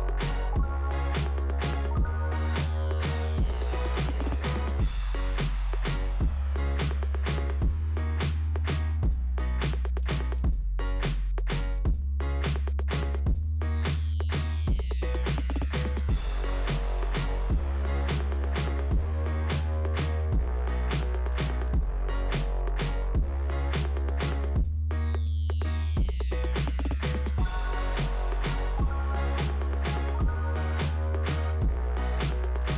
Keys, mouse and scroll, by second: 0.3 click, 4.7 scroll down 1, 6.1 scroll down 1, 9.4 click, 11.1 click, 11.5 Return, 12.2 click, 12.9 click, 17.5-18.3 scroll up 1, 19.5 click, 20.1 click, 23.7 click, 25.4 click, 27.5 click, 27.7 click, 27.7 click, 29.0 click, 30.2 scroll down 2.